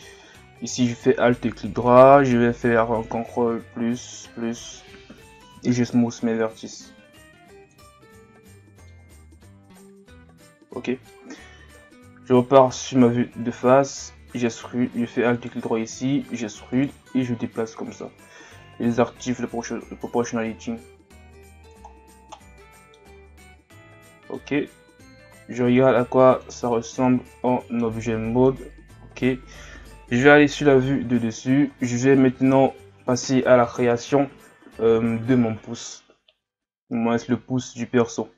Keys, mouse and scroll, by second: 0.2 alt+right click, 0.7 scroll down 2, 1.0-3.7 middle drag, 3.7 ctrl+KP_Add, 4.2 ctrl+KP_Add, 6.3 w, 8.6 middle click, 9.0 Tab, 9.6 scroll down 1, 9.8-11.8 middle drag, 11.8 KP_1, 12.6-13.2 scroll up 1, 13.2 Tab, 13.8-14.3 scroll down 2, 14.3 alt+right click, 15.3 alt+right click, 17.3 click, 18.2 ctrl+z, 18.9 o, 19.5-21.9 drag, 21.9-22.2 scroll down 2, 22.2-23.2 middle drag, 23.2 scroll down 2, 24.1 scroll down 3, 24.1 middle click, 24.4 Tab, 25.8-30.2 middle drag, 30.2 KP_7, 31.2-31.9 scroll up 2, 31.9-33.4 scroll up 5, 33.4-35.5 scroll up 1, 37.6-38.3 scroll down 2.